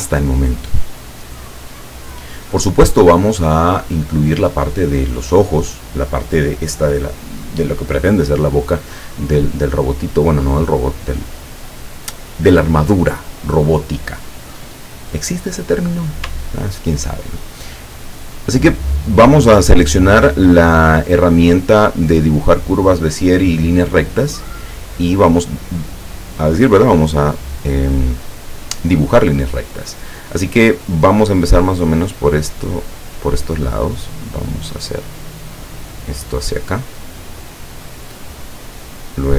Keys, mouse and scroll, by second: 15.1 click, 17.0 ctrl+scroll up 2, 17.9-19.1 ctrl+middle drag, 33.0 click, 39.1 click.